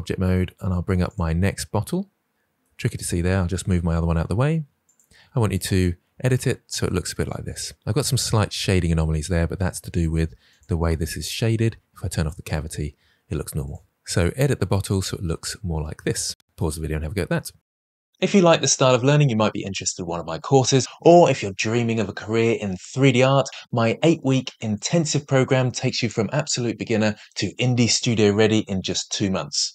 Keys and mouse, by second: 1.0 click, 3.4 g, 3.7 y, 4.8 click, 5.4 click, 10.5-13.9 drag.